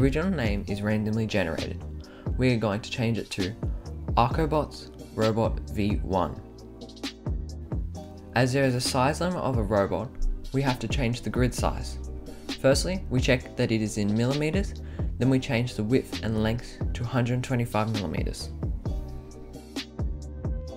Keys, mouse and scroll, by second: 0.3 click, 2.0 shift+a, 2.8 t, 3.4 s, 3.5 space, 5.0-6.9 typing, 11.3 click, 13.5 click, 14.3 click, 15.0 click, 15.9 click, 16.8 click, 17.8 1, 18.6 click, 18.7 click, 19.3-20.7 typing, 20.5 click.